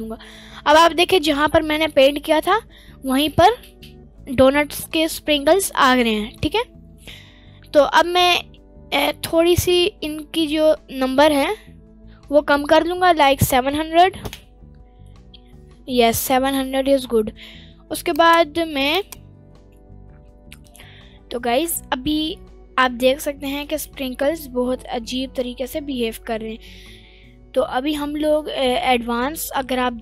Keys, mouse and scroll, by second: 0.1 scroll up 2, 0.2-1.5 middle drag, 1.9-3.3 middle drag, 3.7-4.3 middle drag, 6.0-6.5 middle drag, 7.2 scroll up 1, 8.8 scroll up 5, 8.9-10.7 drag, 11.0-12.5 drag, 12.8-14.5 drag, 13.9 0, 15.0-15.9 middle drag, 18.5 click, 21.2 middle click, 21.7-22.5 scroll down 1, 23.0-23.5 scroll down 2, 23.5-23.9 middle drag, 23.5-23.9 scroll up 1, 24.1 scroll up 1, 24.3-24.9 middle drag, 25.0 scroll down 1, 25.2-25.7 middle drag.